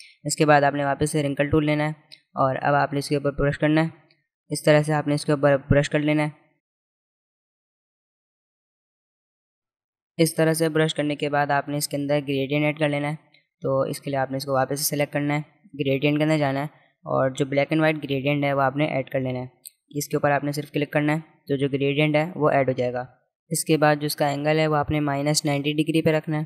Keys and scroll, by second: 12.8 space.